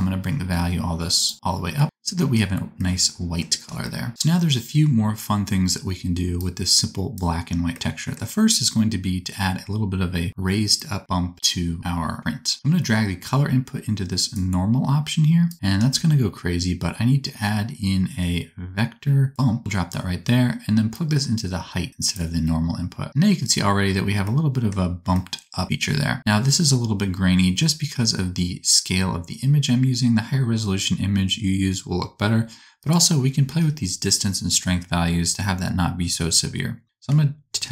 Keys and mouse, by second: 4.1-15.5 middle drag, 15.5-37.7 shift+drag, 15.9 shift+a, 20.9-37.7 middle drag, 20.9-37.7 right drag.